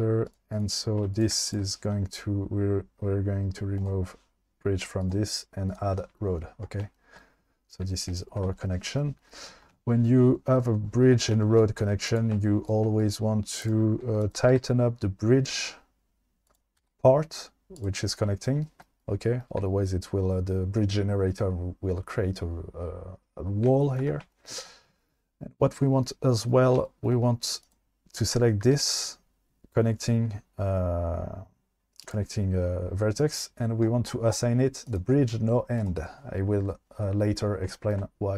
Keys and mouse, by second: 0.5 click, 1.0 2, 1.1 click, 1.5 shift+click, 3.8 click, 5.0 click, 8.2 shift+middle click, 11.8 1, 12.1 click, 12.6 shift+click, 13.0 right click, 14.2 click, 14.5 g, 14.6 g, 16.8 g, 17.8 click, 27.6 click, 28.7 g, 32.0 click, 34.9 click, 35.8 click.